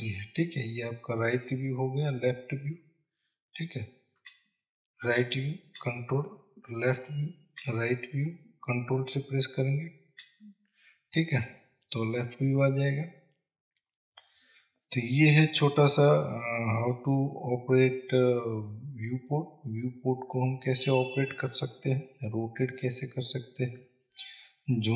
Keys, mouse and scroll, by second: 2.7-4.6 scroll down 1, 4.6 KP_3, 6.1 ctrl+KP_3, 8.0 KP_3, 10.6 ctrl+KP_3, 12.5-14.3 scroll up 1, 14.3-24.9 middle drag, 16.9-20.0 scroll up 2, 21.5-23.0 scroll up 2.